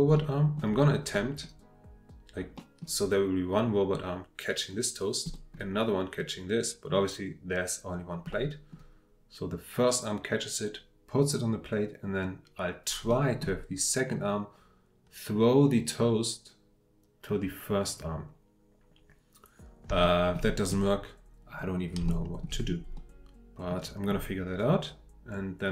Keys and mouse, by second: 0.1-0.6 middle drag, 1.1-1.4 middle drag, 2.6 middle drag, 5.3 middle drag, 8.3-13.0 drag, 13.1 click, 20.0-20.3 shift+middle drag, 22.1-22.4 shift+middle drag, 22.9-24.1 drag.